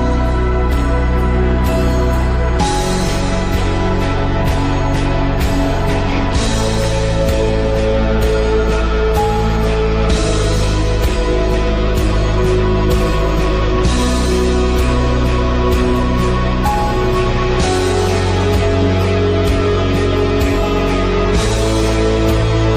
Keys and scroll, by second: 3.0 ctrl+l.